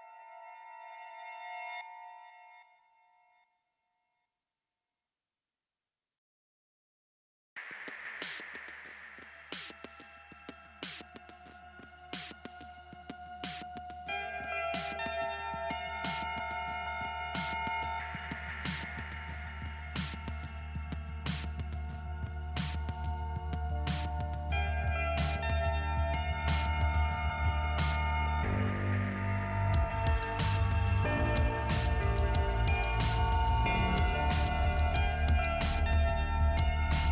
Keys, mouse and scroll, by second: 0.1 click, 2.8 middle click, 5.2 right click, 5.9 click, 8.2 click, 10.3 click, 12.6 click, 14.4-14.8 scroll up 2, 16.4 click, 18.0 click, 19.5 click, 20.9 scroll down 2, 22.1 middle click, 25.0-25.5 scroll down 2, 25.5 middle click, 27.0 click, 27.3 scroll up 2, 27.8-28.1 scroll down 1, 28.9 scroll down 1, 31.7 scroll up 2, 31.9 scroll down 2, 32.1 scroll up 2, 32.2 scroll down 2, 35.3 click, 36.5 click.